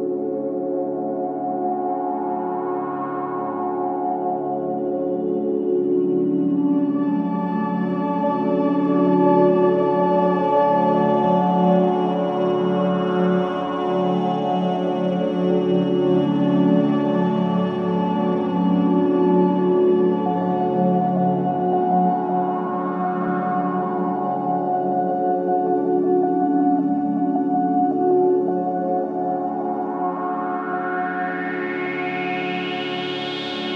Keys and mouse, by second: 0.5 Right, 2.4 i, 3.1 click, 4.7 click, 6.2 Left, 7.7 i, 8.6 click, 9.8 click, 10.3 click, 11.3 n, 15.7 click, 16.8 click, 18.8 click, 19.8 7, 20.1 2, 20.5 0, 20.8 Return, 22.1 i, 24.5 click, 24.5-25.1 typing, 26.9 space, 27.3 click, 27.5 space, 28.6 space, 28.9-33.7 drag.